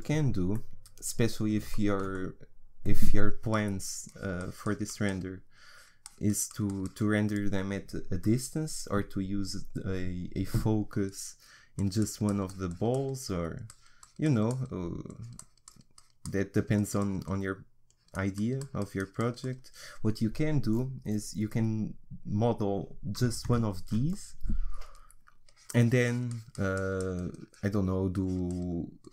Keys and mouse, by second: 0.5-2.1 middle drag, 4.1-8.8 drag, 8.8 middle click, 10.3-11.8 middle drag, 11.8-21.5 drag, 21.5-24.1 middle drag, 25.5-29.1 drag.